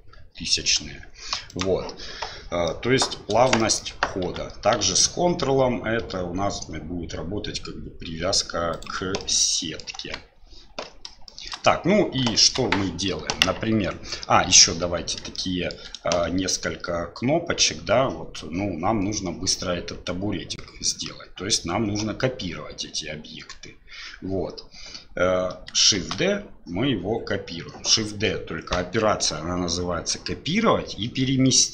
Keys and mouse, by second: 2.7-3.0 middle drag, 3.6 shift+middle click, 4.3 s, 9.2-9.8 middle drag, 10.0 KP_1, 11.3 shift+middle drag, 12.3 shift+middle drag, 15.4-15.8 shift+drag, 26.0 shift+d.